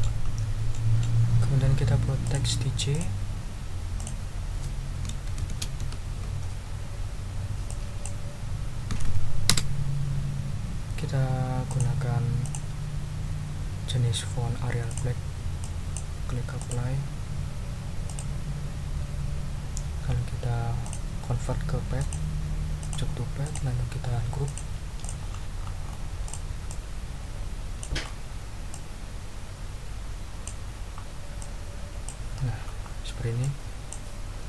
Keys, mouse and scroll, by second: 0.2 ctrl+scroll up 1, 0.7 ctrl+middle click, 1.0 ctrl+scroll up 1, 2.2 click, 2.9 click, 4.0 click, 5.0 shift+d, 5.4 shift+j, 6.2 ctrl+a, 7.7 click, 8.9 5, 9.5 Return, 11.7 click, 12.4 click, 14.2 scroll down 2, 14.9 click, 15.6 click, 16.6 click, 18.1 click, 20.8 click, 22.0 click, 22.8 click, 23.4 click, 24.4 click, 25.0 ctrl+click, 25.3-26.1 ctrl+scroll up 2, 26.2 ctrl+click, 26.7-27.7 ctrl+drag, 27.7 ctrl+middle click, 28.0-28.5 ctrl+scroll up 2, 28.7-30.5 ctrl+middle drag, 30.5 ctrl+click, 30.7-31.2 ctrl+scroll up 4, 31.4 ctrl+click, 32.7-33.1 ctrl+scroll down 2, 33.4 ctrl+click.